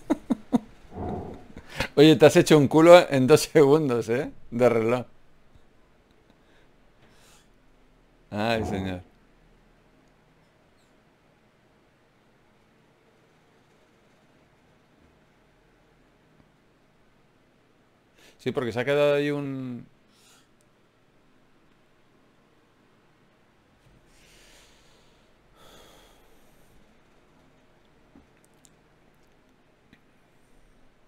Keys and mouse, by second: 0.0 ctrl+Tab, 2.7 ctrl+Tab, 4.7 x, 6.5 ctrl+Tab, 7.5 click, 7.9 right click, 10.7 g, 12.5 x, 15.3 g, 16.1-17.3 drag, 17.3 alt+m, 19.6 ctrl+Tab, 20.9-22.4 drag, 22.4 f, 23.6 KP_Divide, 26.6 ctrl+Tab, 26.7-28.6 drag, 30.0 KP_Divide.